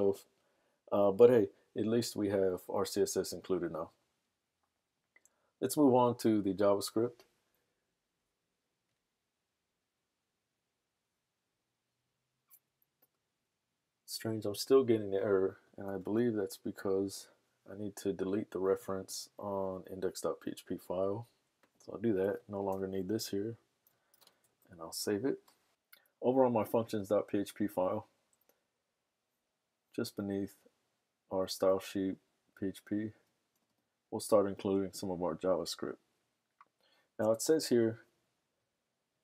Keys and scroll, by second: 17.6 super+Tab, 22.9 BackSpace, 24.3 super+s.